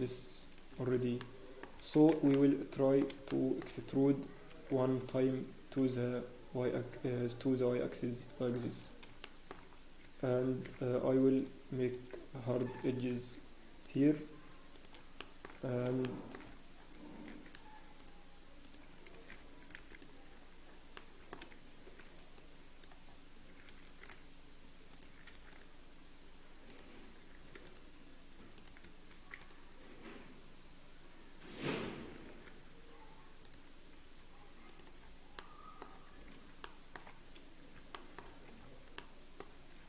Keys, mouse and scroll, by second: 1.2 middle click, 1.7 scroll down 10, 2.1 shift+z, 2.3 middle click, 2.3 scroll up 3, 3.3 shift+middle click, 3.7 scroll up 1, 4.5 e, 9.0-9.6 scroll up 5, 9.2 shift+middle click, 10.4 ctrl+r, 15.2 ctrl+shift+r, 15.2 shift+middle click, 15.5-15.9 scroll up 1, 16.0 shift+middle click, 16.7 scroll up 3, 17.2 ctrl+r, 19.1 Escape, 19.1 scroll up 6, 19.3-19.8 scroll down 6, 19.8 ctrl+s, 19.9 click, 20.3-20.9 scroll down 1, 20.9 middle click, 21.8 scroll down 5, 21.8 shift+b, 23.0 scroll up 1, 23.8 ctrl+r, 35.0 scroll down 1, 35.4 middle click, 35.9 scroll down 4, 36.1-36.4 scroll down 1, 36.6 shift+middle click, 37.2 scroll down 2, 37.9 shift+middle click, 38.2 scroll down 1, 38.2 scroll up 1, 38.9 middle click, 38.9-39.5 shift+scroll up 9.